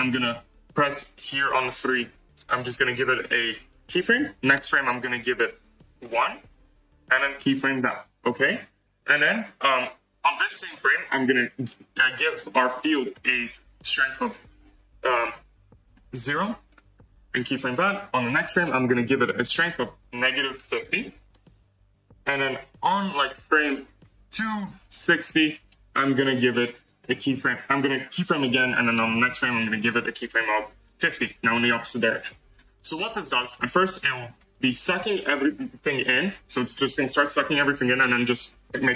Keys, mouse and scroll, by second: 1.9 click, 4.5 Right, 5.3-6.6 drag, 7.6 click, 10.8 click, 14.0-16.4 drag, 17.5 click, 18.2 Right, 19.0-21.6 drag, 22.5 click, 23.2 scroll down 2, 23.4 scroll up 1, 23.9 scroll down 1, 25.3-28.0 drag, 28.3 click, 29.0 Right, 29.6-32.1 drag, 33.4 click, 34.3 click, 35.1 space.